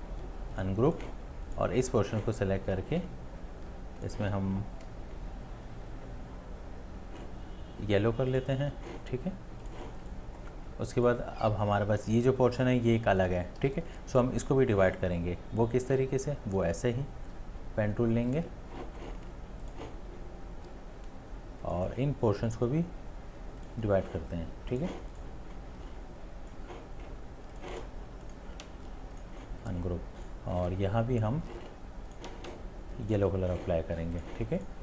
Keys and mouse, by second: 13.6 right click, 13.8 ctrl+z, 28.3 ctrl+z.